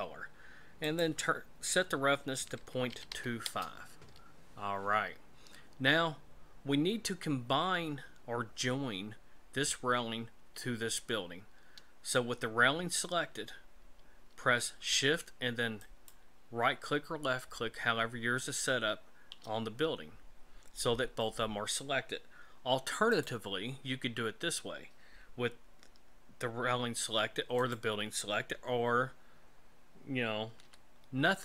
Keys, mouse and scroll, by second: 0.9 click, 5.9-6.9 scroll down 2, 6.9-8.2 scroll up 1, 15.8 shift+right click, 23.1 right click, 27.6 right click, 30.5 a, 30.6 a.